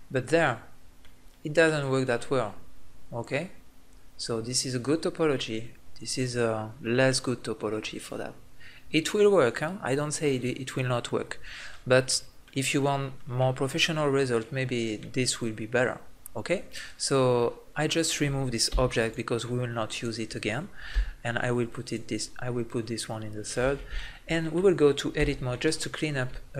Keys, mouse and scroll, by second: 11.7 middle click, 15.0-18.6 middle drag, 18.6 x, 19.9-20.9 right drag, 20.9 m, 23.5 middle click, 25.2 Tab.